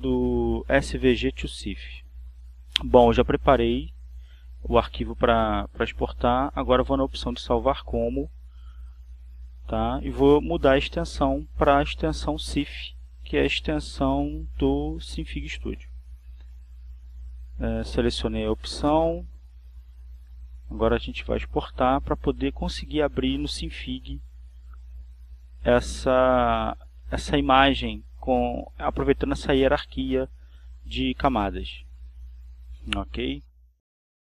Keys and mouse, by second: 0.1 click, 5.3 click, 6.7 click, 11.7 click, 16.9 click, 18.7-20.1 drag, 21.6 click, 26.7 click, 30.2 click.